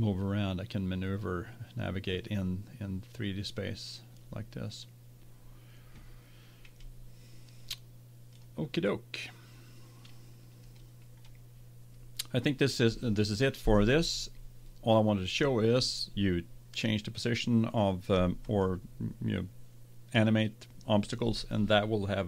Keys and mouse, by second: 1.2 middle click, 8.4-10.0 drag, 18.5-20.4 drag.